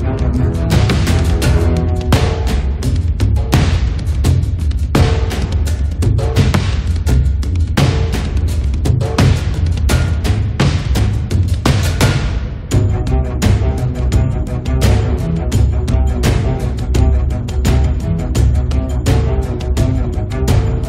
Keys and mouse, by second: 2.1-7.0 middle drag, 2.1 right click, 3.4-5.8 drag, 7.0-14.0 drag, 12.1-15.0 middle drag, 12.2 right click, 13.2 right click, 15.2 click, 16.2-17.2 middle drag, 16.6 click, 16.6 right click, 17.4 middle click, 17.5-18.7 drag, 17.5 right click, 19.1 middle click, 19.3 click, 19.7 click, 19.9 middle click, 20.3 click.